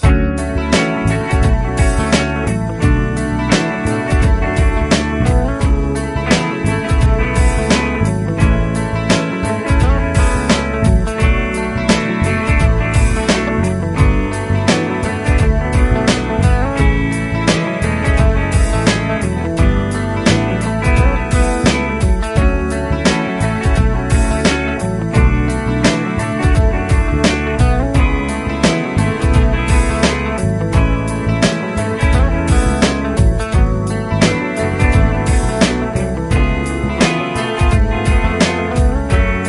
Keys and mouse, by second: 5.1 typing, 8.5 double click, 12.6 typing, 16.0 typing, 17.7 double click, 20.4 typing, 22.1 typing, 23.8 double click, 26.7-28.3 typing, 31.6 shift+click, 35.8 shift+click, 38.3 F2.